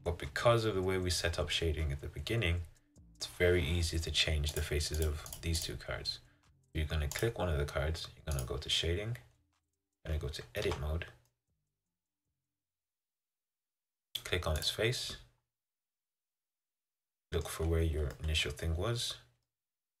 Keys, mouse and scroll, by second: 4.7 click, 5.2 click, 5.5 click, 5.8 click, 7.3 click, 8.6 click, 10.8 Tab, 11.4-14.8 middle drag, 14.8-20.0 drag.